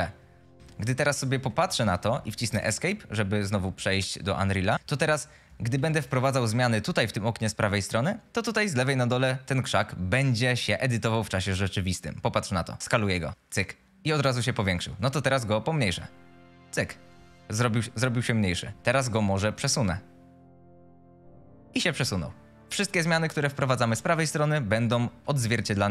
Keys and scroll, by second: 1.5 a, 2.4 Escape, 4.3-5.5 typing, 18.9 w, 25.3-25.9 typing.